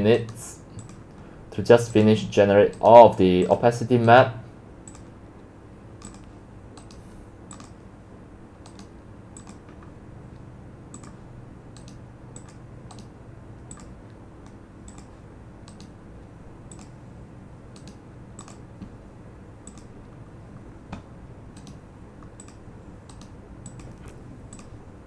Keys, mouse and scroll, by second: 2.9 right drag, 3.4 right click, 3.8 right click, 4.2 right click, 4.3 drag, 4.4-4.8 right drag, 5.0 click, 8.0-8.6 drag, 10.6-11.9 drag, 11.9-12.3 right drag, 12.6-13.1 drag, 13.9-15.9 drag, 15.9-16.9 right drag, 16.9-17.9 drag, 17.9-18.6 right drag, 20.2-21.7 middle drag, 21.7-22.7 right drag, 22.7-23.3 drag, 23.3-23.7 right drag, 24.7 click.